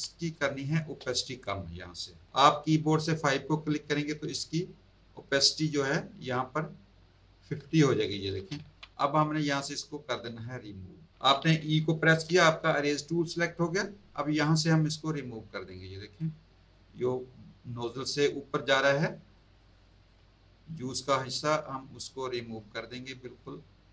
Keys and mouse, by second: 0.4 space, 0.5 click, 1.4 click, 4.2 KP_5, 8.6 z, 12.1 e, 14.7 click, 16.2 click, 18.1 click, 21.2 click.